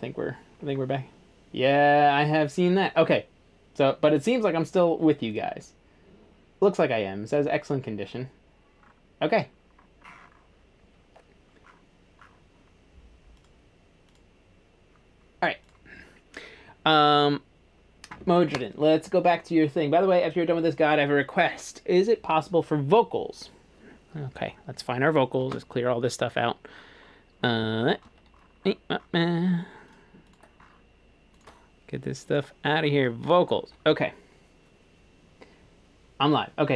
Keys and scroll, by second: 25.5 shift+super+s.